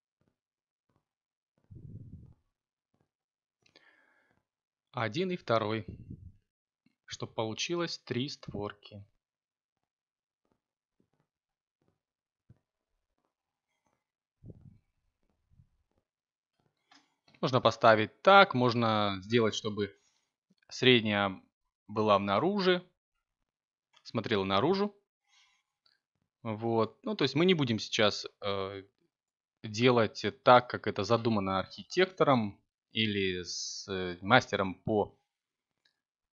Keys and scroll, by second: 3.6 g, 4.4 y, 9.1 f, 10.4 x, 12.6 g, 13.1 x, 27.6 g, 28.7 y, 31.5 g, 32.3 x.